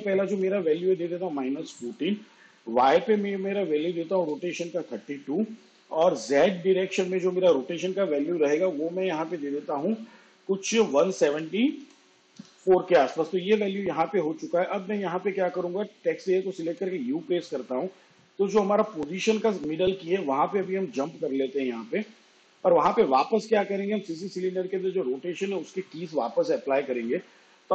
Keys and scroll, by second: 2.7 2, 9.6-11.1 typing, 15.0 u, 27.0 -.